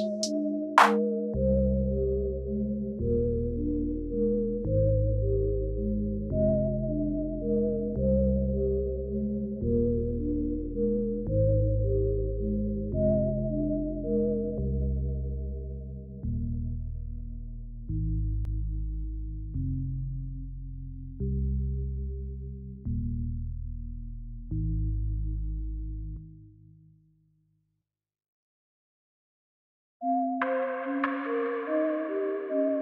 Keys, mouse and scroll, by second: 1.5 h, 2.6 click, 3.4 click, 4.1 click, 6.7 right click, 10.2 click, 14.8 click, 18.1 click, 22.9 click, 22.9 i, 30.5 click.